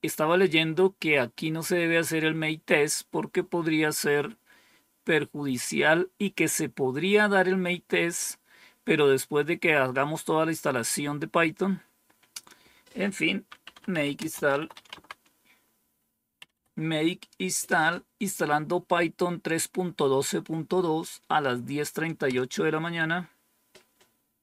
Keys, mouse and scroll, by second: 12.3 click, 13.3-16.5 typing, 22.2 Return.